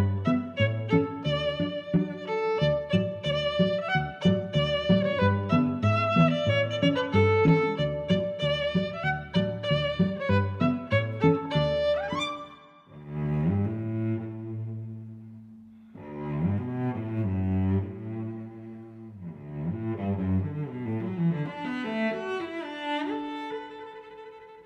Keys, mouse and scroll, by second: 0.6 click, 1.0 middle click, 1.6 click, 2.4 middle click, 3.4 middle click, 4.1 g, 4.2 y, 5.1 click, 5.6 middle click, 6.0 Tab, 6.4 middle click, 6.8 click, 7.1 click, 7.7 click, 8.1 click, 10.8 click, 11.5 click, 12.2 shift+super+Tab, 12.7 g, 13.0 z, 13.9 click, 14.3 middle click, 15.0 s, 15.1 x, 16.7 click, 17.0 middle click, 19.1 g, 19.2 y, 20.6 click, 21.0 middle click, 21.5 click, 22.6 g, 22.9 y.